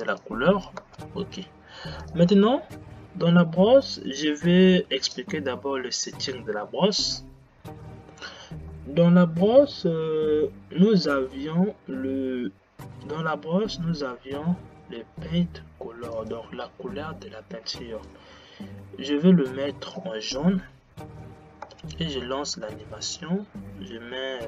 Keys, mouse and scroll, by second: 0.9 space, 18.3 click, 21.7 space, 23.1 click.